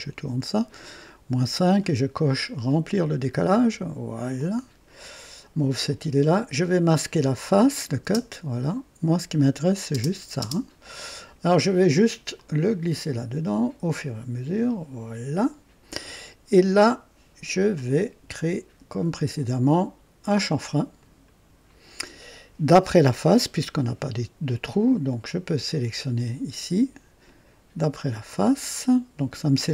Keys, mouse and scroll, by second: 2.7 click, 4.3 click, 5.8 click, 7.1 click, 8.0 space, 9.3 click, 9.9-10.4 typing, 12.3-15.3 drag, 20.9 click, 25.7 click, 27.7 click.